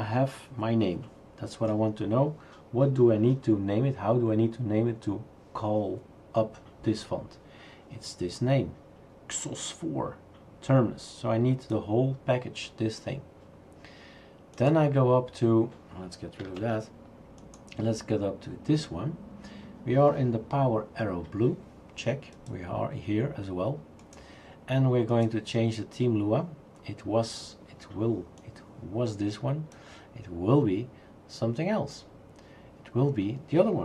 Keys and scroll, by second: 16.6 shift+super+q.